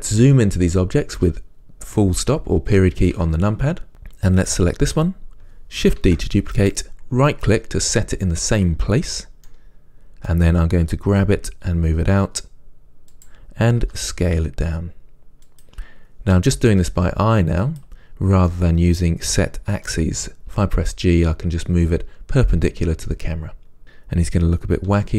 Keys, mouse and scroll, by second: 3.3 KP_Decimal, 3.9-4.7 scroll down 2, 4.7 click, 6.2 shift+d, 9.6-14.1 middle drag, 11.3 g, 14.1 s, 16.6 g, 18.7-25.0 middle drag, 20.7 g.